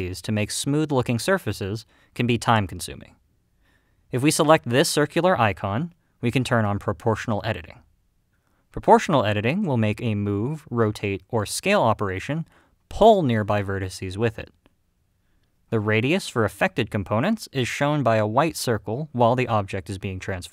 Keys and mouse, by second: 0.3 click, 0.7 g, 1.1 click, 2.0 middle click, 2.5 g, 3.0 click, 3.4 middle click, 5.6 click, 9.1 click, 9.7 g.